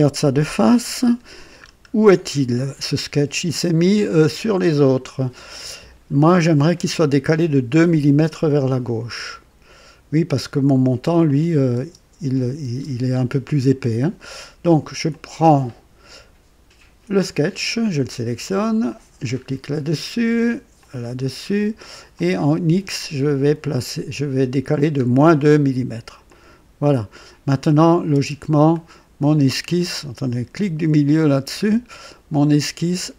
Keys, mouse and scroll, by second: 0.2 KP_1, 1.0-1.8 scroll up 4, 2.2-3.0 right drag, 11.2 click, 11.8 space, 12.6 space, 15.1 click, 18.9 click, 20.8 click, 22.1 click, 23.0-23.8 scroll down 4, 26.3 click, 27.8 click, 28.3 space, 28.7 click, 29.7 right click, 31.3 middle click.